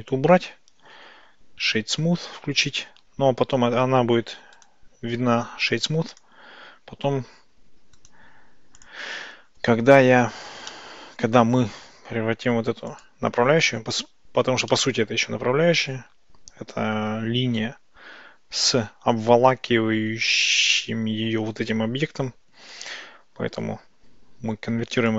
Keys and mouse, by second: 10.7-11.5 middle drag, 12.9 click, 14.8-15.5 middle drag, 25.0-25.1 drag.